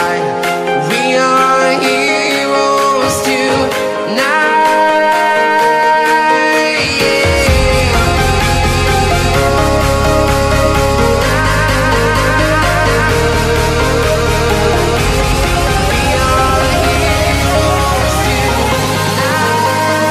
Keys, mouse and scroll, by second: 2.9 s, 3.7 click, 15.9 v, 16.5 click, 17.9 click.